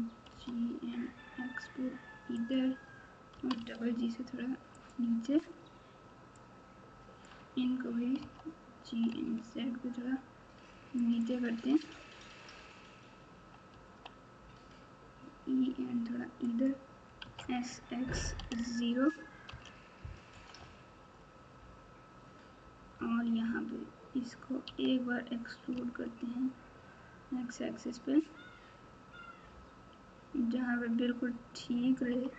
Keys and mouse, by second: 0.3 g, 3.3 g, 6.6 click, 8.2 g, 13.7 e, 17.2 s, 20.3 KP_8, 20.5 KP_8, 24.6 e.